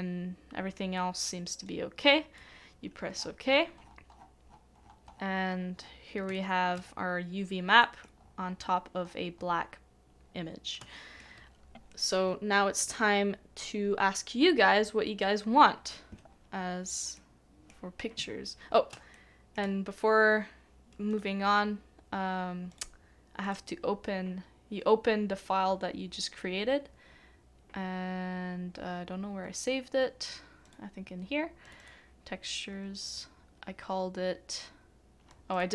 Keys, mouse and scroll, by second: 3.1 Return, 3.1-3.4 scroll up 1, 3.4-4.4 scroll down 1, 4.4-4.8 scroll up 1, 4.8 scroll down 1, 5.3 scroll up 1, 5.7-6.2 scroll down 1, 6.3 shift+middle click, 6.8 scroll down 1, 7.8 middle click, 8.2-8.5 scroll down 1, 9.3-9.8 scroll up 1, 9.8-10.2 scroll down 1, 10.2 scroll up 1, 10.3-10.8 scroll down 1, 11.6 shift+middle click, 17.1 shift+middle click, 19.1 shift+middle click, 31.8 shift+middle click.